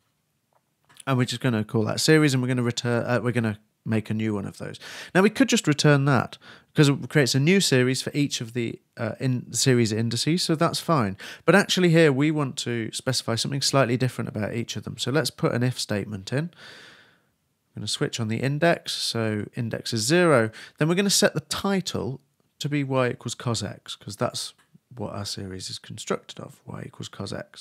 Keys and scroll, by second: 1.9 shift+e, 2.8 shift+Return, 3.1 shift+space, 3.2 shift+8, 4.7-5.7 typing, 16.6-17.4 typing, 20.5 shift+space, 20.6 shift+[, 20.9 shift+Return, 25.2-26.1 typing.